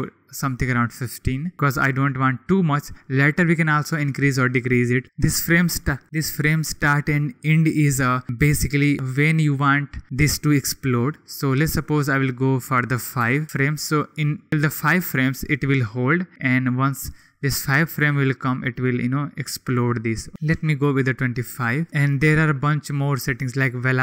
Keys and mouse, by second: 2.3 click, 12.6 click, 14.8 click, 16.0 click, 20.3 click, 23.5 click.